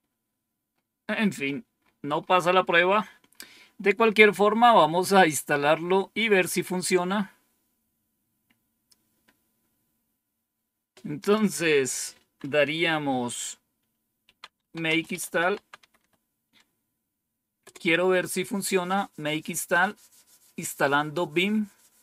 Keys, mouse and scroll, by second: 0.9-4.4 scroll down 7, 11.1 click, 13.9-16.4 typing, 17.5 typing.